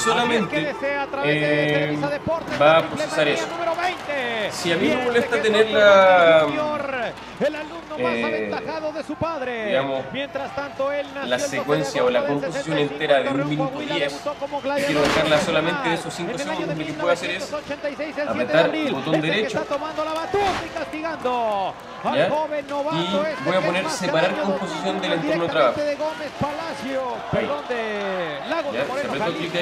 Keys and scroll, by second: 6.5 alt+super++, 10.6 alt+super+-, 17.7 alt+super++, 21.1 alt+super++.